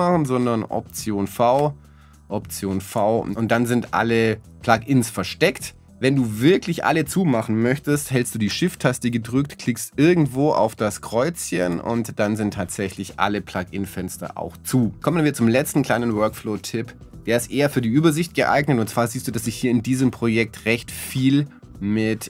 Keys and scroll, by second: 0.2 alt+v, 1.6 alt+v.